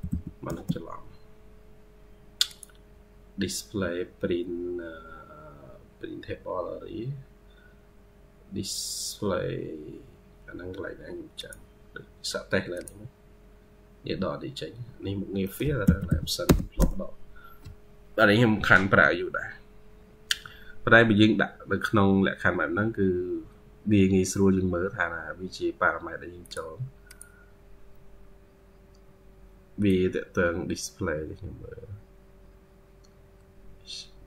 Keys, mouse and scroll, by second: 15.3 middle click.